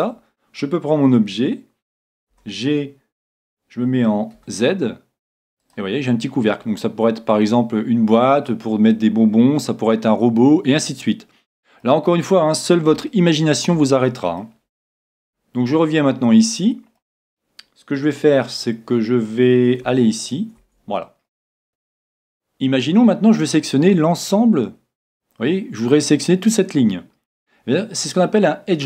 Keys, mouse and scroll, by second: 0.0 Tab, 2.3 g, 5.8-7.7 drag, 6.1-8.2 middle drag, 8.9-10.8 middle drag, 13.1-15.5 middle drag, 15.2 Tab, 16.0 middle click, 17.4 middle click, 19.9 t, 20.2-21.7 right drag, 21.0 middle click.